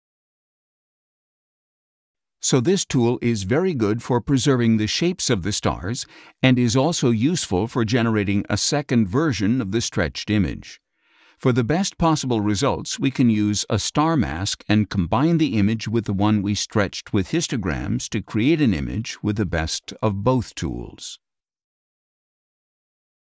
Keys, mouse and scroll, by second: 1.0 click, 2.8-8.1 drag, 10.6-12.6 drag, 14.1 click, 15.0 click, 16.3 click.